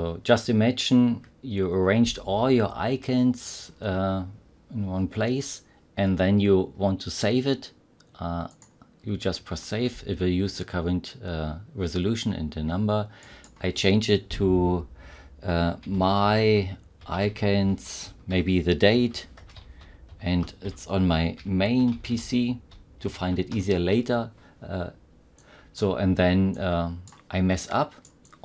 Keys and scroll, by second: 15.8 F2, 15.8-23.9 typing.